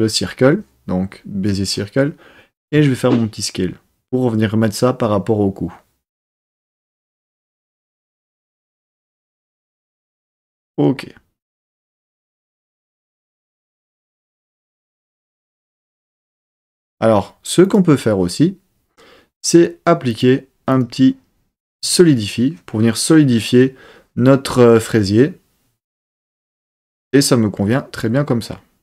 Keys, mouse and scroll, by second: 2.6 s, 9.8 click, 17.6 click, 20.0 click, 20.7-22.1 drag.